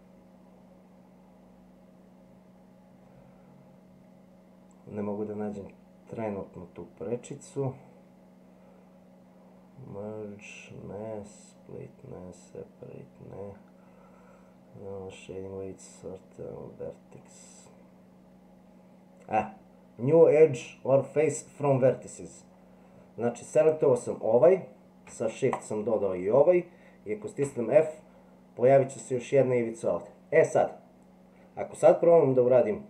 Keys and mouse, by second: 27.4 f.